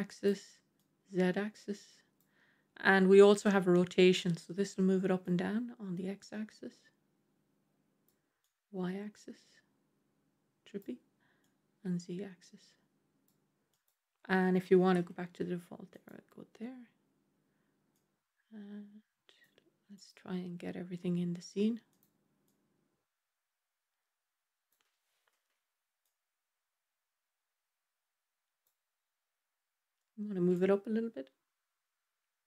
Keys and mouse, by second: 0.8-2.1 drag, 5.1-8.0 drag, 8.3-10.7 drag, 11.4-13.2 drag, 13.6-15.8 drag, 17.9-19.3 drag, 19.8-21.8 drag, 22.3-24.6 drag, 25.3 KP_0, 25.9-28.6 drag, 30.4-32.4 drag.